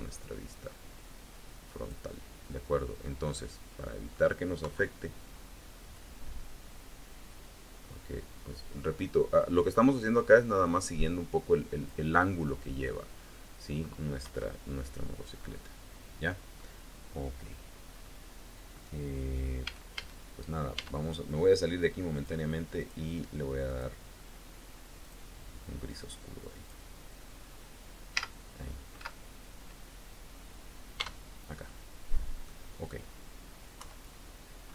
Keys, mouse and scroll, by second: 2.3 middle click, 3.1-4.1 drag, 4.5 KP_3, 5.8-9.5 drag, 9.5-10.0 scroll up 1, 10.1 scroll down 2, 10.4-11.3 scroll up 1, 12.7-13.2 scroll up 1, 13.2 scroll down 1, 14.1 KP_1, 15.2-15.7 scroll up 1, 15.8-16.1 scroll down 1, 16.4 scroll up 1, 16.7-17.3 scroll down 2, 17.8 scroll up 2, 19.5 a, 20.6 Tab, 22.0 click, 23.5 click, 24.9 click, 25.7 click, 28.0 z, 28.8 z, 30.8 Tab, 31.5-32.5 drag, 32.8-33.1 scroll up 1, 33.6 KP_3, 34.5-34.7 scroll up 1.